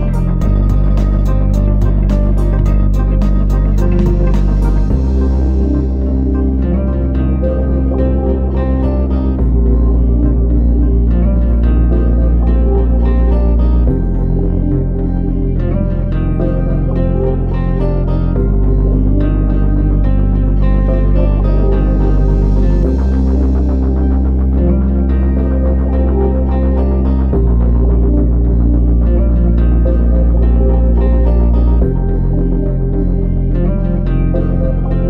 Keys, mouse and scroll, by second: 15.3 scroll up 1, 16.1 middle click, 16.7 shift+middle click, 20.0 click, 33.1 scroll down 1, 33.6 middle click, 33.6 scroll down 1.